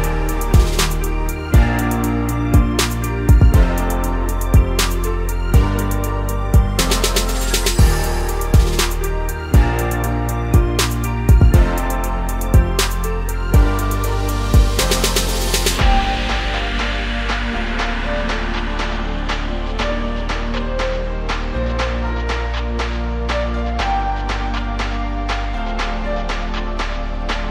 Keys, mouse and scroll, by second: 10.6 scroll down 1, 10.7 middle click, 11.2-11.5 scroll up 3, 11.5 middle click, 11.9 scroll up 1, 12.2-13.5 middle drag, 13.5-14.5 drag, 16.1 click, 16.5 scroll down 3, 16.7-17.7 middle drag, 17.7 scroll up 1, 18.5 click, 18.7-19.1 scroll down 3, 21.5-27.5 drag.